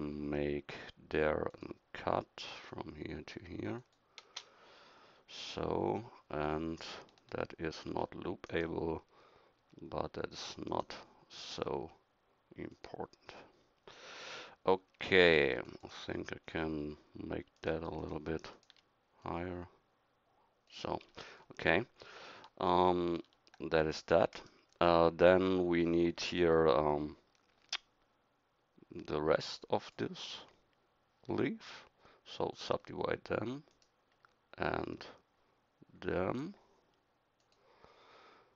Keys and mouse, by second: 7.9 ctrl+r, 14.9 a, 15.4 v, 23.0 ctrl+r.